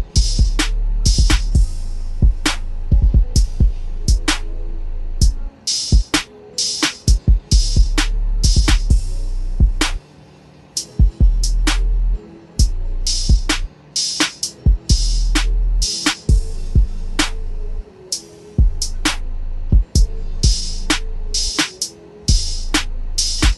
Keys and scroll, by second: 2.8 ctrl+a, 3.6 ctrl+c, 7.0 ctrl+v.